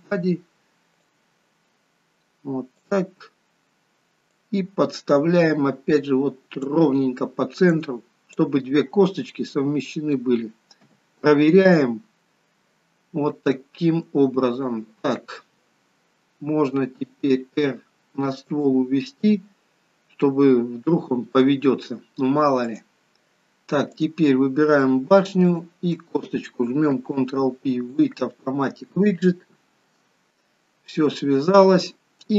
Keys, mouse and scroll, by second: 1.0 click, 4.4 click, 7.7 click, 9.3 middle click, 10.9 KP_3, 22.7 click, 24.0 click, 25.5 shift+click, 25.7 shift+click, 26.9 ctrl+p, 31.2 middle click.